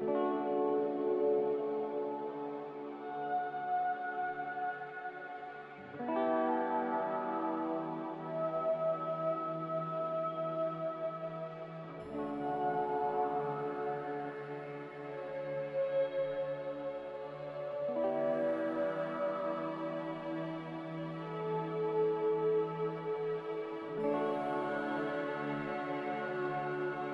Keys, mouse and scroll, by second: 16.4-17.2 typing, 17.5 Return, 26.8 Delete.